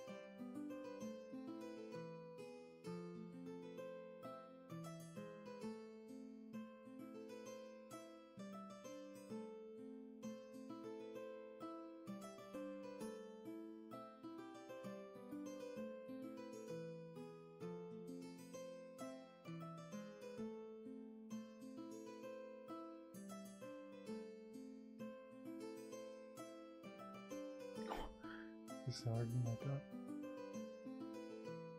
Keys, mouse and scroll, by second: 5.1 scroll up 1, 11.2 ctrl+z, 15.2 ctrl+z, 17.2 ctrl+z, 19.5 ctrl+z, 23.1 ctrl+z, 30.7 ctrl+z.